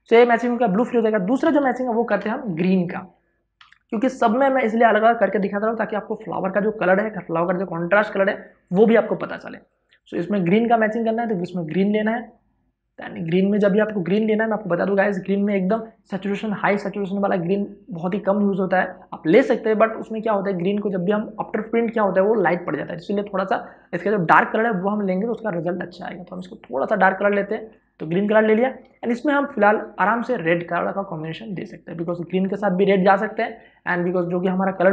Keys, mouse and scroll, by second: 1.0 ctrl+d, 1.2 alt+i, 1.8 Return, 3.4 v, 9.4 click, 9.9-10.6 scroll down 1, 10.6-15.3 drag, 24.5 click, 28.6 v, 29.2 click.